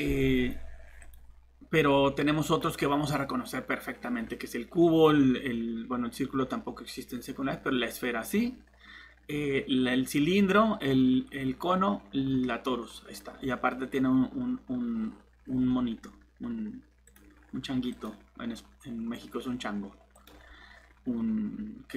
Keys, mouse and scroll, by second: 14.9 scroll down 1, 15.4 scroll up 1, 17.1 click.